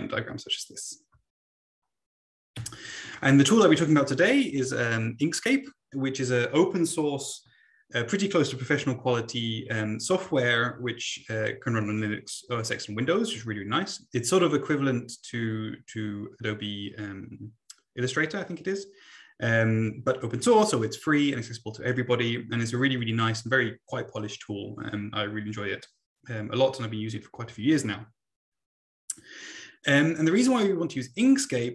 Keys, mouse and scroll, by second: 2.6 Right, 31.6 Right.